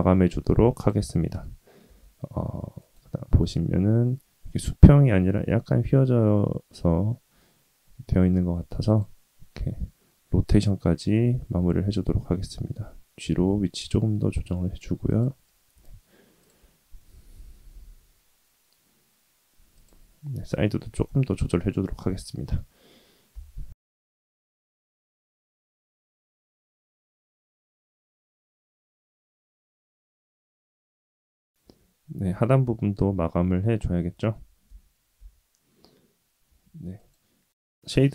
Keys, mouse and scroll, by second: 1.8 r, 3.3 r, 9.6-10.2 scroll down 3, 10.2-11.1 scroll up 2, 11.1 g, 15.7 r, 16.6-17.0 scroll down 1, 17.7 s, 20.0-20.4 scroll down 1, 20.6 shift+middle click, 21.3 middle click, 21.7-22.1 scroll down 1, 22.1 middle click, 22.6-23.3 scroll up 2, 23.3 KP_3, 24.3-24.6 scroll up 1, 24.7 shift+middle click, 25.4 g, 30.6-31.1 scroll down 1, 31.7 shift+middle click, 32.3 KP_3, 32.6-33.0 scroll up 3, 33.0 shift+middle click, 33.2 shift+middle click, 33.8 Tab, 34.0 Tab, 34.0 ctrl+z, 34.9-36.3 right drag, 36.3-37.1 middle drag, 37.1-37.9 scroll down 1, 37.9-38.1 middle drag.